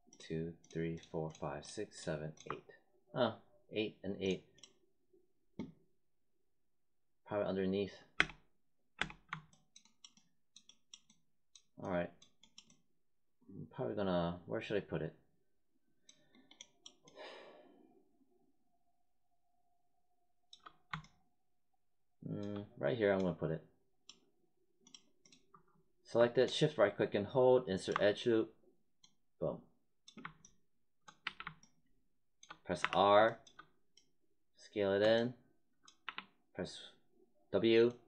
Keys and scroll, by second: 8.1 space, 31.2 w, 32.7 r, 36.0 w.